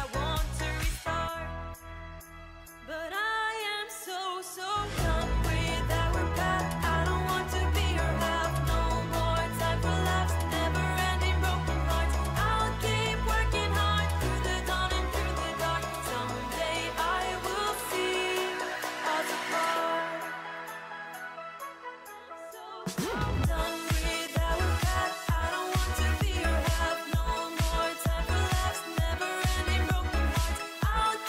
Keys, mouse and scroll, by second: 9.7 ctrl+click, 10.8 ctrl+e.